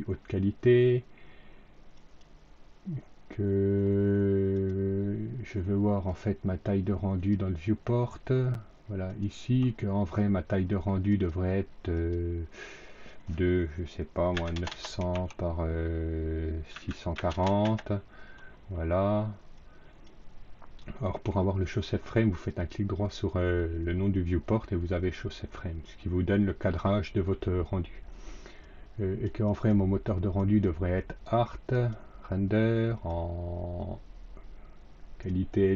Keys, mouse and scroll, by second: 1.8 click, 4.4 click, 6.0 click, 7.1 click, 9.0 click, 11.0 click, 11.8 click, 12.7 click, 14.2 KP_9, 14.4 KP_0, 15.0 Tab, 16.6 KP_6, 17.1 KP_4, 17.2 KP_0, 17.6 KP_Enter, 19.5 click, 22.4 click, 28.5-29.2 drag, 29.4 click, 30.3 click, 31.6 click, 33.0-35.2 drag.